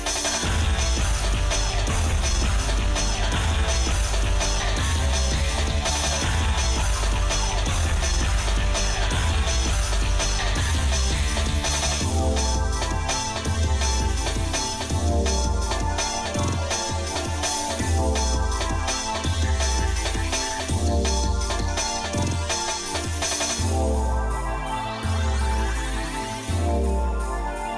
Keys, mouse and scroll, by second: 1.8 shift+middle click, 2.6 click, 4.8 shift+middle click, 6.2 ctrl+KP_Add, 8.4 click, 9.2 ctrl+click, 9.8 Tab, 10.5 shift+middle click, 11.7 KP_Divide, 13.0-17.0 shift+middle drag, 17.5 ctrl+z, 18.9 shift+middle click, 19.7 scroll up 1, 20.2 Tab, 20.9 shift+middle click, 21.6 ctrl+z, 23.1 ctrl+z, 23.6 ctrl+z, 24.0 ctrl+z, 24.7 ctrl+z, 25.0 ctrl+z, 27.3 click.